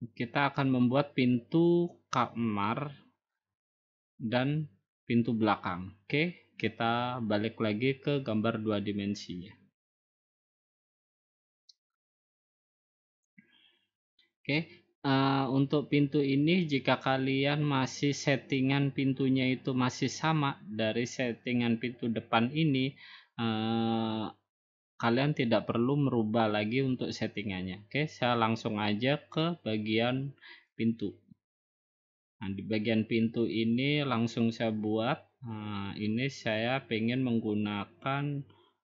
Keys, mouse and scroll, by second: 10.3 click, 11.4-12.0 scroll down 4, 12.0-12.4 scroll down 4, 12.4-13.1 scroll up 4, 13.4 scroll down 1, 14.1-14.4 scroll up 1, 21.2 middle click, 21.2 middle click, 21.7 middle click, 21.8 middle click, 23.5 middle click, 24.0 middle click, 30.8 click, 31.9 middle click, 32.0 middle click.